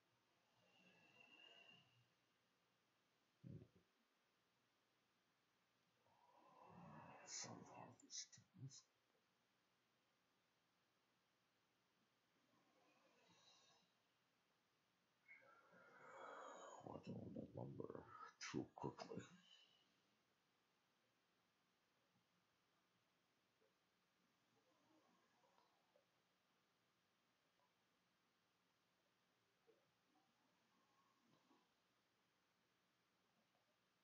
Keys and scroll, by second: 29.4 BackSpace, 30.3 BackSpace, 33.7-34.0 typing.